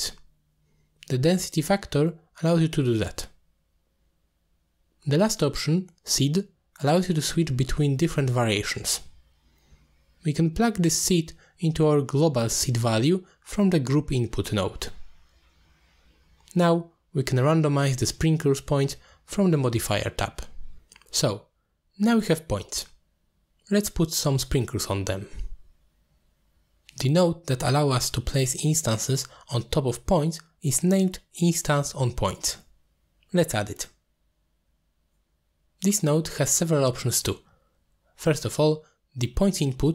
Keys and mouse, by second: 1.5-2.8 drag, 6.5 click, 6.9 click, 8.3 click, 8.6 click, 9.2 click, 9.9 click, 10.3-11.6 drag, 11.6-12.2 middle drag, 11.6 0, 12.3 shift+a, 17.2-17.5 drag, 18.0 click, 18.8 ctrl+h, 19.5-20.5 drag, 20.6 click, 21.2 middle click, 22.6 middle click, 24.9 click, 25.8 click, 26.0-26.4 drag, 27.3 middle click, 28.1 middle click, 28.7 click, 29.8 click, 30.4 ctrl+s, 32.2 middle click, 33.0-39.0 drag.